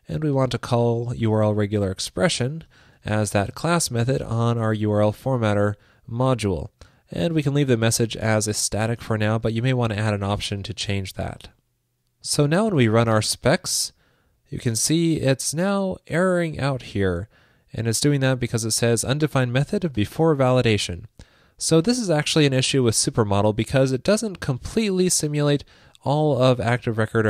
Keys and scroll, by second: 0.8 super+c, 3.3 super+v, 10.8 super+s.